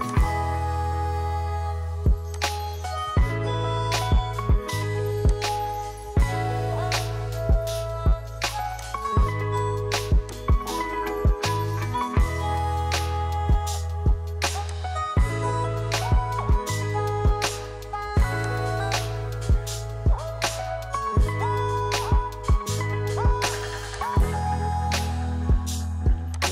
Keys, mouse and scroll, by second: 2.4-26.5 drag.